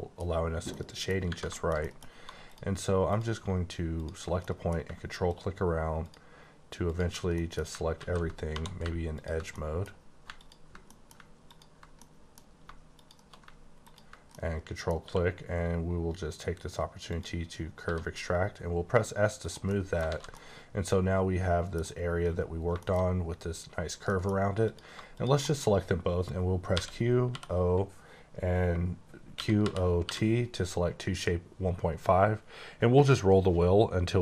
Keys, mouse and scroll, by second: 0.7 middle click, 0.8 scroll down 1, 1.2 Tab, 1.5 middle click, 2.1 1, 2.4 click, 3.0 click, 3.9 ctrl+click, 4.4 middle click, 5.2 ctrl+click, 6.0 ctrl+click, 6.8 ctrl+click, 7.3 middle click, 7.9 ctrl+z, 8.4 2, 9.1 ctrl+click, 9.5 middle click, 10.3 click, 10.8 middle click, 11.4 click, 11.9 middle click, 12.9 click, 14.3 middle click, 15.0 q, 17.1 click, 17.8 s, 19.4 click, 19.6 middle click, 20.1 alt+a, 20.3 middle click, 24.1 middle click, 24.6 click, 25.4 middle click, 27.2 typing, 29.4-30.0 typing, 32.6-33.6 scroll down 2, 33.6-34.2 scroll up 1.